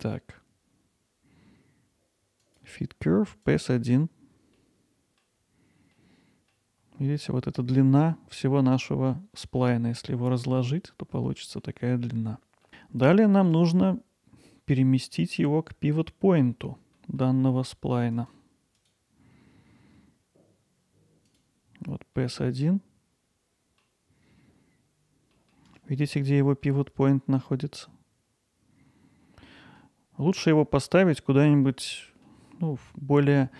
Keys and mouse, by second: 2.4-3.6 drag, 4.6-5.2 middle drag, 6.0-6.9 middle drag, 11.4 middle drag, 17.0 middle drag, 18.2 click, 21.3 click, 22.2-23.8 middle drag, 25.3-26.1 middle drag, 26.2-26.6 alt+middle drag, 29.5-30.2 middle drag, 30.4 middle click, 31.4-31.8 middle drag, 32.0-32.3 middle drag, 32.6 middle drag.